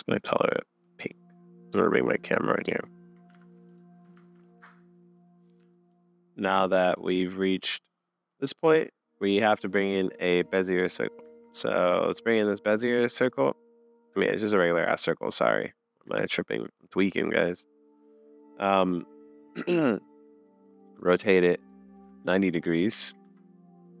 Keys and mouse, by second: 1.2-1.7 drag, 3.4 super+s, 4.2 shift+a, 4.6 super+s, 4.6 space, 6.0 click, 6.2-8.5 middle drag, 9.4 middle click, 11.3 super+s, 11.5 middle click, 11.9 shift+a, 14.2 typing, 14.5 middle click, 16.1 Tab, 16.5 middle click, 17.2 Tab, 17.4 middle click, 18.4-20.3 middle drag, 20.5 middle click, 22.0 super+z.